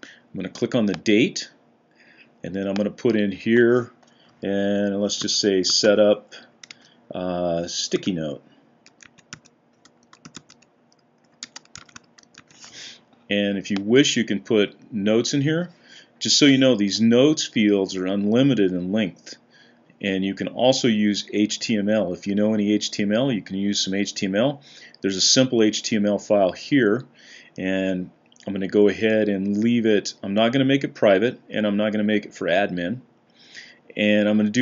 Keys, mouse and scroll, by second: 4.8-6.7 typing, 7.8-12.7 typing.